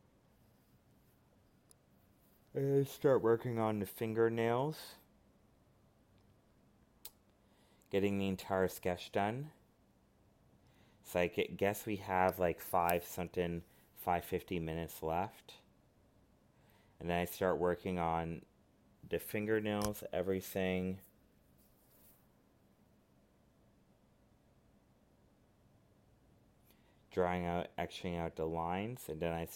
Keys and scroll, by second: 1.5 alt+space, 3.8 ctrl+z, 6.1 alt+space, 16.6 ctrl+z, 16.9 alt+space, 18.5 alt+space, 20.8 ctrl+z, 26.6 alt+space, 29.0 ctrl+z.